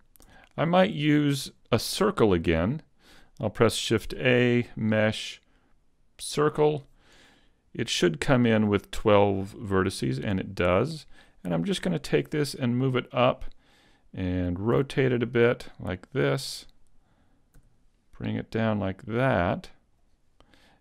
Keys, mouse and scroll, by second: 0.3 Tab, 0.8 shift+middle click, 1.5 a, 2.1 shift+middle click, 4.1 shift+a, 8.0 t, 10.0 t, 11.9 g, 13.4 click, 14.7 r, 16.8 click, 17.6 g, 19.9 click.